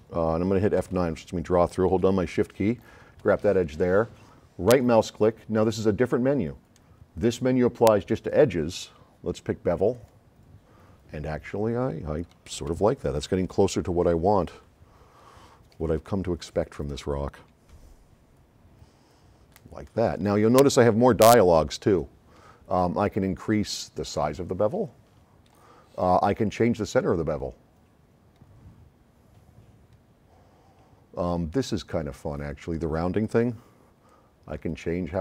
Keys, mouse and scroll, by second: 0.8 F9, 2.5-2.8 shift+drag, 4.7 right click, 10.0 click, 12.4 right click, 12.4 s, 14.9 right click, 23.1-24.7 drag, 30.9-32.4 drag, 33.3 click, 34.1-34.9 drag.